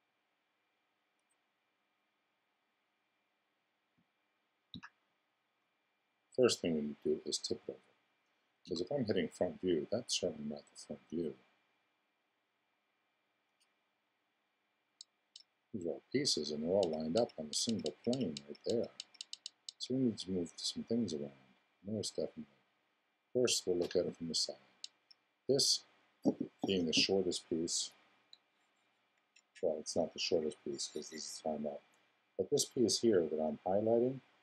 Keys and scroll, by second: 4.7 4, 8.6 2, 23.7 4.